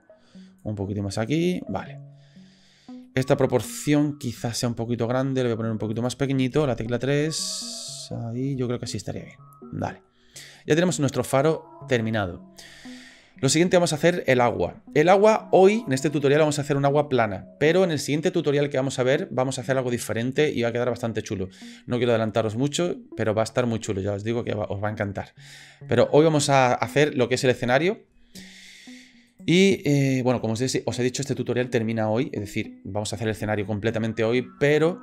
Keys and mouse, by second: 0.7 click, 1.5 middle click, 3.0 middle click, 4.1 middle click, 4.6 s, 6.5 KP_3, 8.7 shift+middle click, 9.8 middle click, 10.6-10.9 middle drag, 29.3 middle click.